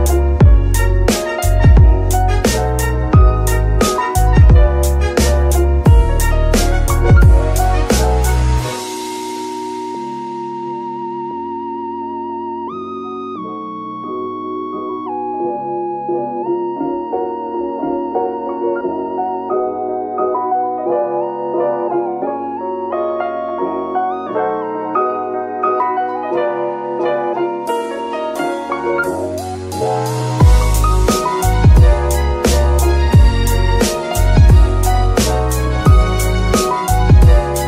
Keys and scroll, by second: 4.3-5.9 typing, 6.1 Return, 8.1 Tab, 8.5 shift+s, 9.5 Tab, 9.9 shift+s, 10.7 KP_Decimal, 14.5 KP_9, 14.7 KP_0, 14.8 Return, 19.3 g, 19.4 z, 32.7 KP_3, 33.2 shift+KP_3, 35.1 shift+d, 36.5 F2, 37.4-37.6 typing.